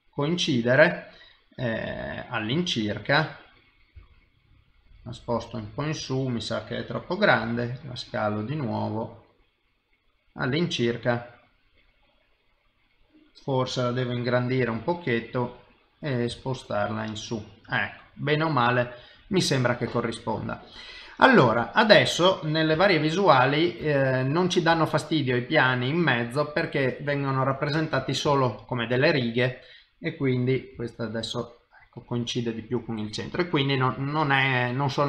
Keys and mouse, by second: 0.4 middle click, 6.0 middle click, 7.4 s, 10.7 middle click, 17.6 middle click, 19.2 middle click, 20.3 middle click, 22.7 KP_1, 23.8 KP_3, 24.7 KP_7, 28.3 shift+middle click, 29.4 click, 30.7 g.